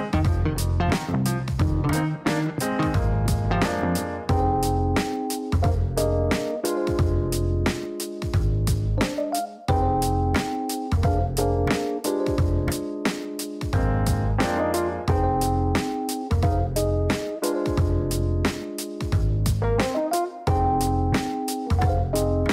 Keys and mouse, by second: 4.8 click, 5.5 click, 8.6 click, 9.3 click, 11.3-13.8 typing, 13.8 Down, 14.0 Down, 14.2 Down, 14.4 Down, 14.6 Down, 14.7 Down, 15.0 Down, 15.3 Return, 15.8 Return, 17.5 click, 18.5 click, 19.8 click, 20.5 middle click.